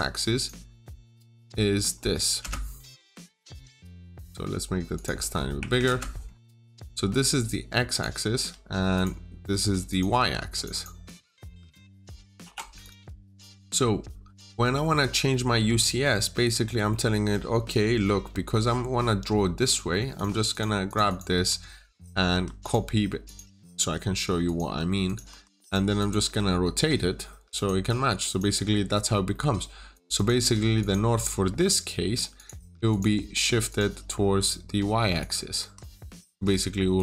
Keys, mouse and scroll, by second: 0.7 double click, 2.3 Return, 3.2 click, 3.9 double click, 4.8 click, 5.6 typing, 5.7 Return, 7.2 click, 8.5 Return, 8.8 click, 10.0 click, 10.6 double click, 12.7 click, 13.2 scroll down 1, 13.4 middle click, 14.2 scroll down 1, 14.3 middle click, 14.6-15.0 scroll up 1, 15.0 scroll down 1, 15.2 middle click, 16.3-16.8 scroll up 1, 16.8 middle click, 20.0 click, 20.4 double click, 21.2 typing, 21.4 Return, 22.2 Escape, 22.5 click, 23.4 typing, 23.7 Return, 24.3 click, 25.2 Escape, 25.5 click, 25.9 double click, 26.3 typing, 26.3 Return, 26.7 Tab, 27.4 click, 28.6-29.2 scroll up 1, 29.2 middle click, 29.8 click, 30.0 double click, 30.3 typing, 30.4 Return, 30.7 click, 32.5 Escape, 32.8 click, 35.5 Escape, 36.8 click.